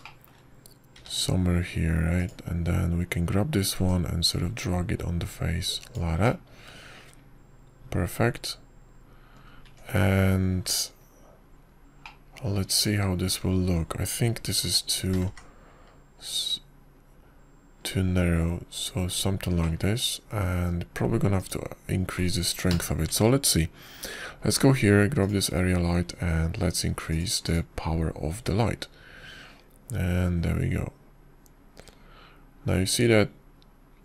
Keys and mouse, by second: 0.0 KP_5, 1.2 shift+middle click, 1.9 shift+middle click, 2.8 g, 5.7-7.8 drag, 8.1-11.3 middle drag, 11.5 Tab, 13.9-15.2 drag, 14.5 right click, 16.5 s, 21.5-22.4 drag, 21.5-22.4 right drag, 23.2 click, 24.5 ctrl+KP_0, 27.1 click, 29.0 click, 29.3 click, 30.3-34.0 drag.